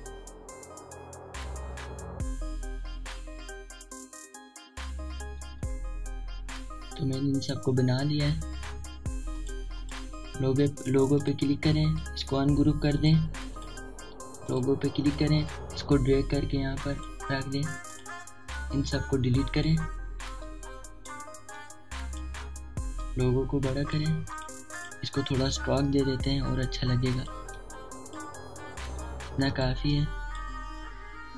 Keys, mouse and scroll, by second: 0.1 typing, 0.2 click, 0.6-2.5 drag, 2.5 alt+scroll down 1, 3.0 space, 3.1 click, 3.1 space, 3.4 click, 3.5 space, 4.2 alt+scroll down 1, 4.8 alt+scroll down 1, 5.4 alt+scroll down 1, 5.4 typing, 6.5 alt+scroll down 1, 8.3 click, 10.8 right click, 11.9-21.9 drag, 21.3 typing, 21.9-31.3 alt+shift+drag, 25.5 typing.